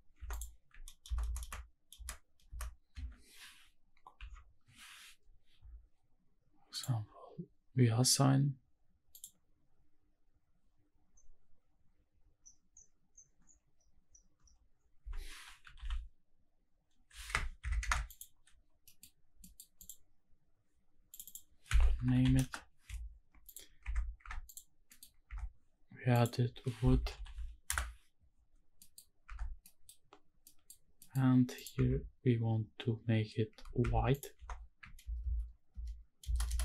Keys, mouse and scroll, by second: 0.2 3, 0.3 click, 1.0 ctrl+KP_Add, 1.2 ctrl+KP_Add, 1.4 ctrl+KP_Add, 1.9 ctrl+KP_Add, 2.4 ctrl+KP_Add, 2.9 ctrl+KP_Subtract, 4.2 ctrl+i, 5.7-6.7 scroll down 2, 6.7 click, 9.1-17.6 drag, 17.8 Tab, 18.0 `, 18.8 middle drag, 19.0 scroll up 1, 19.4 middle drag, 19.7 click, 21.1-22.4 drag, 22.1 o, 23.4 click, 23.8 Tab, 24.2 Tab, 24.4 click, 24.9 middle click, 25.2 Tab, 26.1-27.7 drag, 27.1 o, 28.6-29.2 scroll up 2, 28.7 middle click, 29.2 Tab, 29.5 scroll down 2, 29.6 middle click, 30.0-30.4 scroll up 1, 30.4 middle click, 30.8 scroll up 1, 31.0 middle click, 31.3 scroll down 1, 31.5 click, 31.9 Tab, 33.6 Tab, 33.8 Tab, 34.1 click, 34.3 3, 35.0 ctrl+KP_Add, 35.2 ctrl+KP_Add, 35.7 ctrl+KP_Add, 36.2 ctrl+KP_Add, 36.5 ctrl+KP_Add.